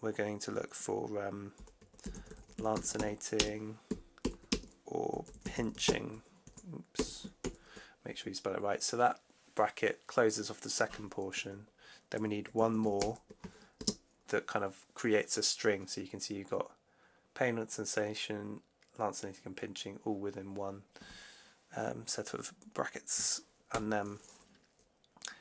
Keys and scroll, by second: 1.2-7.3 typing, 12.9 shift+0, 13.7 space, 23.6 shift+4.